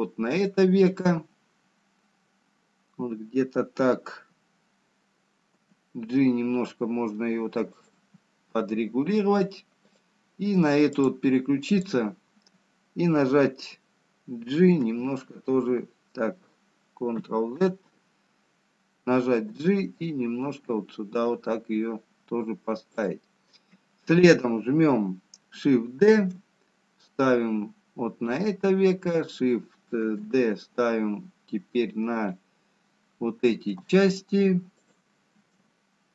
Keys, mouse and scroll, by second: 10.0 click, 12.0 click, 15.2 h, 16.8 ctrl+z, 21.8 g, 27.5 shift+d, 30.8 shift+d.